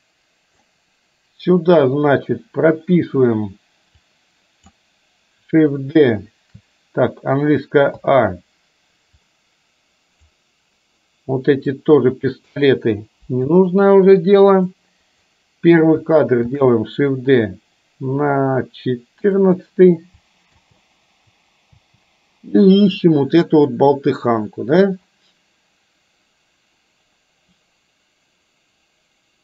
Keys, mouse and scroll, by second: 4.1-4.8 drag, 8.0 a, 9.3-10.3 drag, 11.8 click, 13.3 Delete, 14.7-15.3 drag, 16.6 shift+d, 20.6 space, 21.8 space, 23.1-29.4 drag.